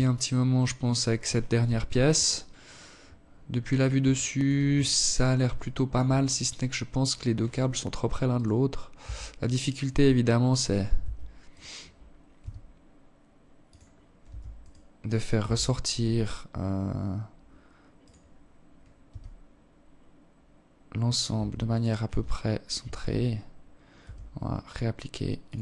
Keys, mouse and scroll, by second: 0.6-1.0 scroll down 10, 1.9-2.4 scroll up 3, 2.4 alt+shift+click, 3.0-3.5 scroll up 3, 3.9 alt+shift+click, 4.7 right click, 6.7 right click, 7.3 Tab, 8.2 Tab, 8.9 right click, 9.3 Tab, 9.8 right click, 10.7 g, 12.6 Tab, 12.9 right click, 13.7 Tab, 14.9-15.3 scroll down 2, 16.3 right click, 17.4 g, 19.7 Tab, 20.1 right click, 20.4 Tab, 21.1 a, 21.3 a, 22.4 r, 23.9 Tab, 24.3 scroll down 3, 25.0 alt+click.